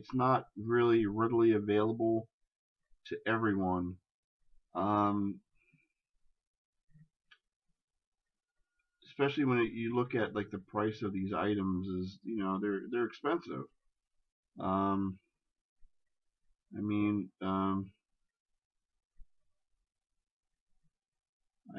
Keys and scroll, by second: 17.3 ctrl+z.